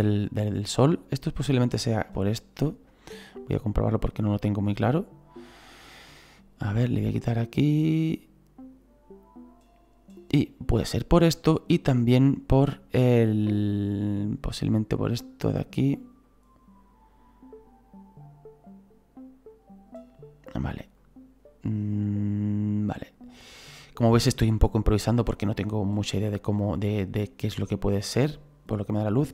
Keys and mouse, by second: 1.5 click, 5.6 click, 6.9 click, 11.7 click, 14.5 click, 16.2 click, 21.0 click, 26.6 click.